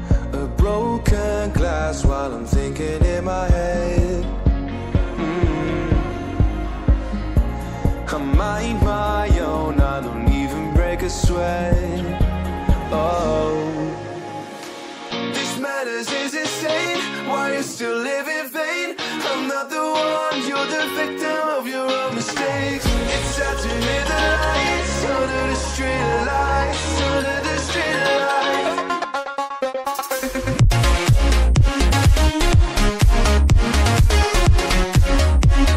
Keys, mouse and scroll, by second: 0.6-0.9 scroll up 1, 1.4 click, 4.8 click, 7.1 click, 10.0 click, 16.2 ctrl+z, 16.9 click, 17.5 BackSpace, 17.5 Delete, 18.5 click, 30.5-31.0 scroll up 1, 31.1 click, 33.3-33.8 scroll up 1, 33.8 click.